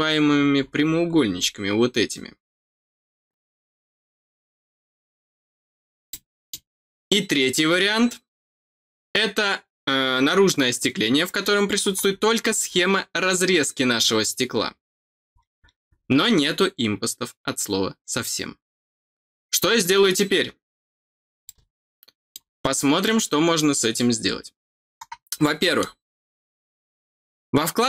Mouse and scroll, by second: 0.3-1.1 scroll up 3, 1.3 scroll up 1, 4.3-4.7 scroll down 2, 5.0-5.6 scroll down 2, 6.0 middle click, 11.8-12.8 scroll up 6, 15.0-15.9 scroll down 4, 21.4 middle click, 25.4 middle click.